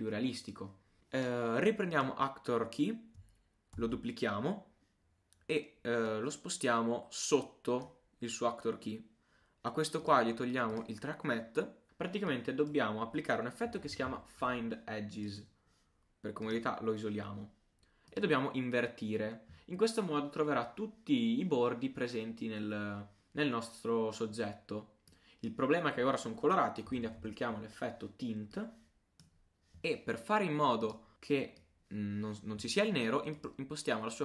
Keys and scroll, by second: 3.8 super+d.